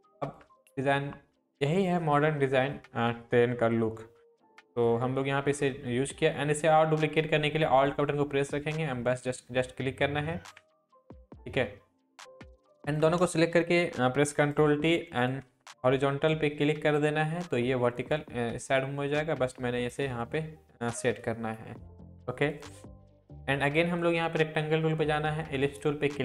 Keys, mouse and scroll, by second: 0.3 shift+click, 0.9-1.9 shift+click, 8.4-10.5 alt+drag, 12.8 shift+click, 13.7 ctrl+t, 14.3 right click, 15.2-26.2 drag.